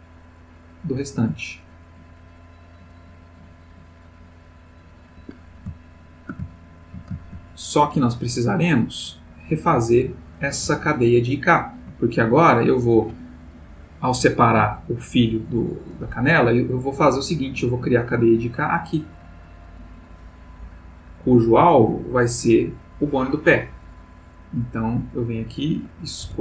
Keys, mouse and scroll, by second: 5.2 Escape, 5.7-6.4 ctrl+middle drag, 6.6-7.1 ctrl+shift+middle drag, 7.7 ctrl+click, 9.4 click, 10.7-12.1 ctrl+middle drag, 12.3 ctrl+click, 18.9 click, 20.2 click, 21.7 click, 22.2 click, 23.4 click, 26.2 p.